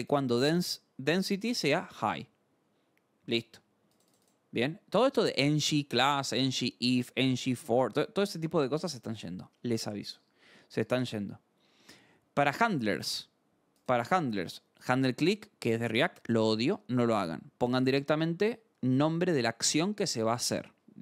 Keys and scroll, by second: 10.1 scroll.